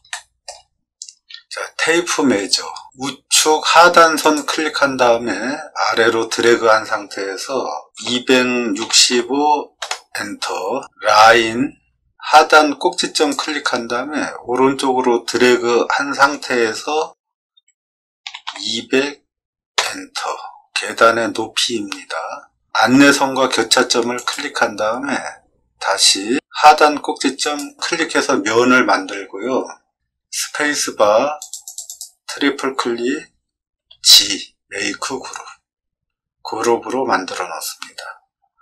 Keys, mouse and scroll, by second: 0.0 middle click, 1.9 t, 4.1 click, 7.9 2, 8.7 6, 9.1 5, 9.8 Return, 11.1 l, 13.1 click, 17.5 2, 18.2 0, 18.4 0, 19.7 Return, 24.1-25.5 drag, 27.3 click, 30.4 space, 31.3 click, 31.6 click, 31.8 click, 33.7 g.